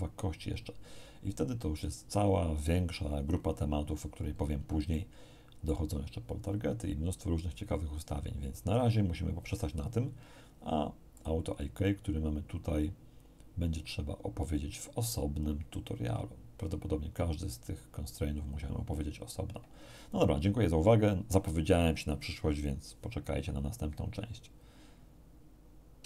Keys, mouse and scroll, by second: 4.9 shift+click, 11.1 click, 26.0 q.